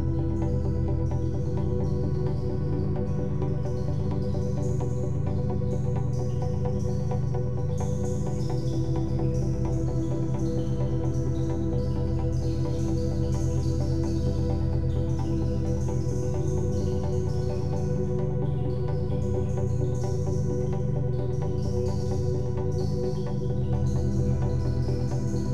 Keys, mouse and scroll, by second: 4.5-7.0 middle drag, 7.0 click, 7.6-8.4 middle drag, 8.4 s, 12.0 click, 12.8 s, 19.1-20.4 middle drag, 20.4 click, 20.8-23.8 middle drag.